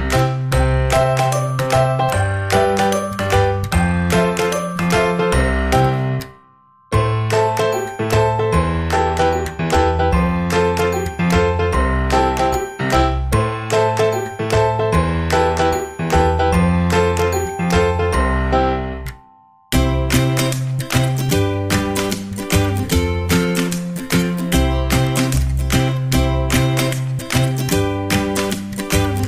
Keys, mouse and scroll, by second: 1.4-5.9 drag, 7.2-8.9 drag, 8.2-10.0 middle drag, 9.5 click, 10.1-11.4 drag, 10.1 middle click, 11.9-13.6 drag, 13.8-15.6 drag, 17.0-19.1 middle drag, 20.6-22.5 drag, 24.7-26.7 drag, 27.1-29.2 middle drag.